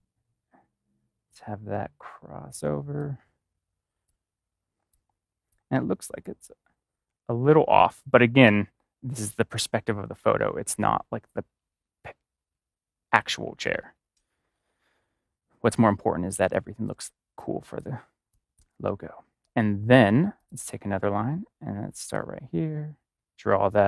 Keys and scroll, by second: 16.4 space, 17.4 space, 18.2 space.